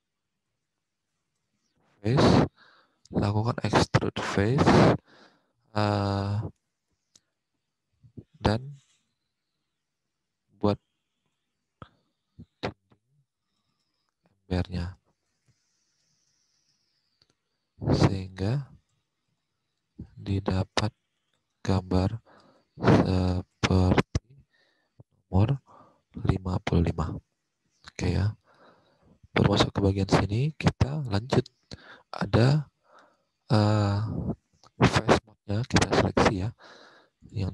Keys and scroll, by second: 0.0-2.3 typing, 8.2-16.8 typing, 18.3-19.9 typing, 21.1-22.6 typing, 24.7-26.1 typing, 35.2 alt+Tab.